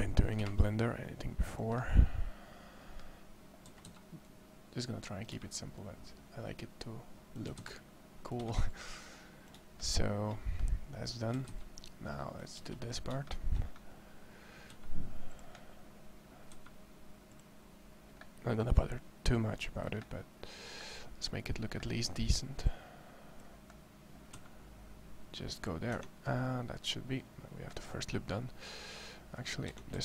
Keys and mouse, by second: 0.6 click, 3.5 a, 3.7 c, 7.3 a, 7.5 c, 8.7 click, 11.1 a, 11.3 c, 14.5 e, 16.3 e, 24.1 e, 25.7 Tab, 29.5 Tab, 29.9 a.